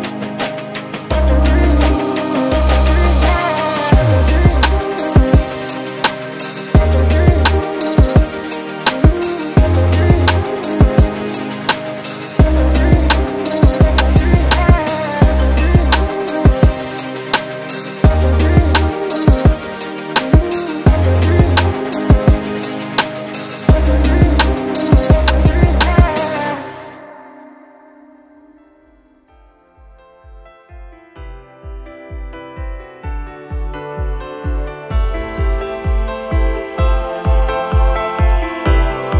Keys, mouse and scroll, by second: 0.3 alt+click, 1.4 alt+click, 2.0 alt+click, 2.4 shift+right click, 3.2 alt+click, 3.5-3.9 scroll up 2, 3.9 alt+middle click, 4.2 alt+click, 6.5 alt+click, 8.0 alt+click, 8.5-10.3 alt+drag, 10.5 shift+right click, 11.2 alt+click, 11.6 alt+click, 12.0 shift+right click, 12.9 alt+click, 13.2 alt+click, 13.5 shift+right click, 14.4 alt+click, 16.1 alt+click, 21.9-30.1 alt+drag, 30.4-31.6 alt+drag, 31.9 shift+right click, 32.6 scroll up 3, 33.2 scroll down 2, 35.7 click, 37.0 click, 39.0 click.